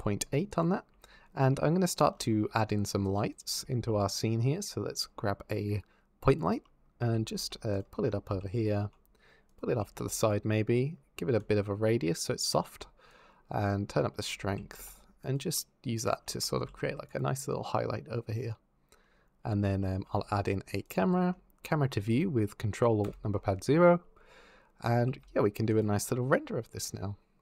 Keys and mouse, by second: 0.3 click, 2.9 click, 3.6 shift+a, 6.8-9.8 typing, 10.0 click, 11.3-12.5 shift+drag, 12.9-14.0 drag, 14.3 g, 14.5 click, 14.7 z, 15.0 click, 15.5 middle click, 16.5 g, 18.1 click, 18.4 middle click, 20.0 shift+a, 21.0 shift+click, 22.9 ctrl+alt+KP_0, 24.8 g, 25.5 shift+click.